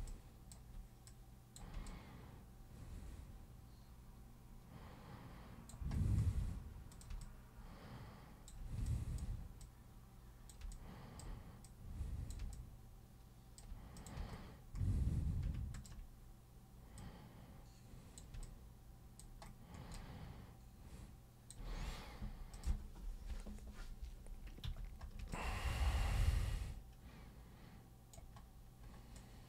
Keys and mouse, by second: 0.1-0.5 alt+super+drag, 1.1 super+click, 1.9-5.7 alt+super+drag, 6.9 super+click, 7.2-8.5 alt+super+drag, 8.8 alt+click, 9.6 click, 10.7-11.2 alt+drag, 11.6 click, 12.6-13.6 alt+drag, 13.9 click, 15.7 ctrl+shift+click, 17.0-18.2 drag, 18.4 alt+super+click, 20.0-21.5 alt+super+drag, 22.5 super+click, 24.7 super+f, 25.3-28.2 alt+super+drag, 29.2-29.4 alt+super+drag.